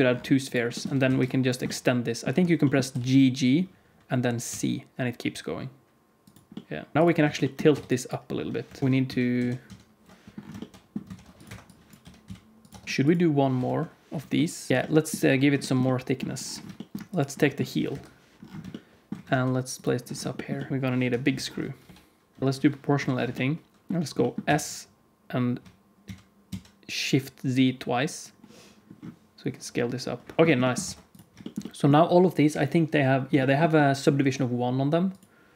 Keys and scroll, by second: 0.8 Tab, 1.0 alt+z, 2.8 g, 6.9 ctrl+s, 7.2 alt+z, 7.6 Tab, 8.6 KP_1, 8.8 alt+z, 8.8 alt+a, 8.8 ctrl+s, 9.3 ctrl+z, 9.6 ctrl+z, 11.0 ctrl+r, 11.9 g, 12.6 Tab, 12.8 alt+a, 12.8 ctrl+s, 13.6 KP_1, 14.7 alt+a, 14.7 ctrl+s, 17.8 KP_1, 19.2 shift+d, 20.7 g, 20.7 x, 20.9 KP_1, 21.8 g, 22.9 o, 24.4 s, 30.4 Tab, 30.4 alt+a, 30.4 ctrl+s, 30.8 ctrl+s.